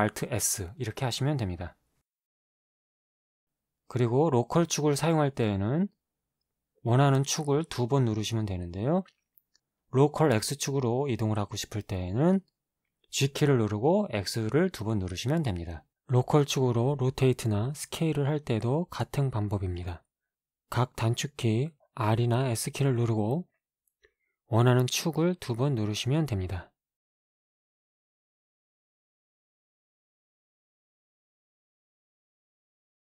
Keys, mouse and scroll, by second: 2.0 r, 2.5 x, 4.4 y, 6.3 click, 8.1 g, 8.4 x, 11.0 x, 14.9 right click, 17.8 s, 18.7 x, 20.3 x, 25.5 click, 25.9-27.0 middle drag, 27.0 s, 29.9 shift+z, 31.2 shift+z.